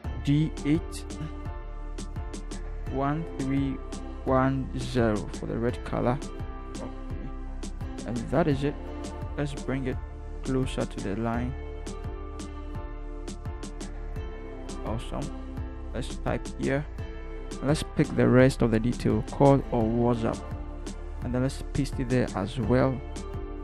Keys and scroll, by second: 0.9 d, 2.1-4.6 typing, 9.2 v, 10.4 Right, 10.6 Right, 10.8 Right, 11.0 Right, 11.2 Right, 11.3 Right, 11.7 Down, 12.0 Down, 12.2 Down, 12.4 Down, 12.5 Down, 15.5 t, 20.4 ctrl+c, 21.5 ctrl+v.